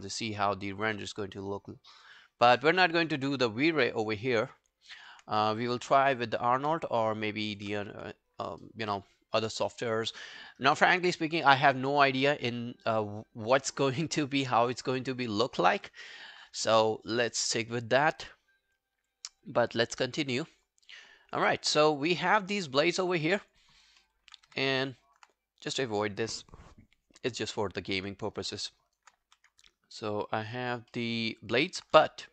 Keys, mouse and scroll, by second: 0.2 right click, 3.8 alt+middle click, 4.1 alt+right click, 4.3 alt+click, 6.2 ctrl+g, 7.3 alt+click, 7.8 w, 22.2 alt+click, 22.6 alt+right click, 22.8 alt+click, 23.4 alt+click, 23.7 alt+right click, 24.0 alt+middle click, 24.5 e, 25.1 alt+right click, 28.6 alt+middle click, 28.8 alt+right click, 29.3 e, 29.6 alt+click, 30.9 alt+middle click, 31.2 alt+right click.